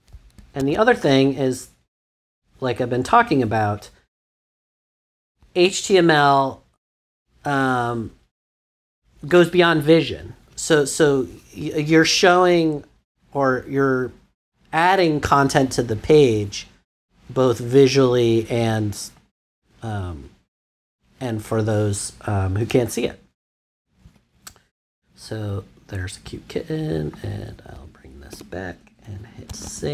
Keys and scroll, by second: 0.6 super+s, 28.3 5, 29.1 super+5, 29.4 super+s.